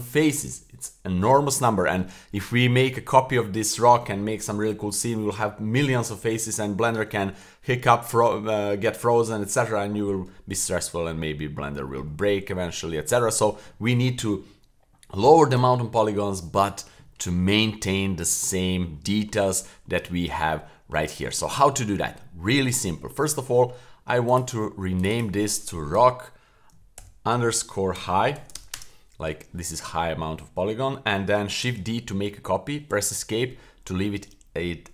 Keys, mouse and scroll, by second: 18.3-18.7 middle drag, 18.9-19.3 middle drag, 19.5 scroll up 1, 19.6 scroll down 1, 19.8-20.4 middle drag, 20.6-20.9 middle drag, 21.0-21.4 middle drag, 21.6-22.5 middle drag, 22.8 middle click, 24.2 click, 25.0 click, 25.1-28.7 drag, 31.6 shift+d.